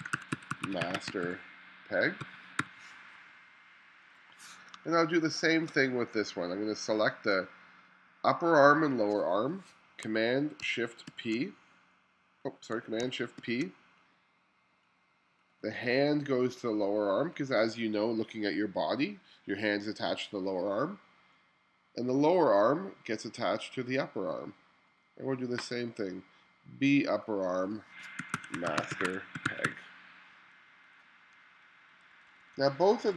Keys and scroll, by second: 0.0-2.6 typing, 4.8 space, 11.1 shift+super+c, 28.0-30.2 typing, 32.1 1.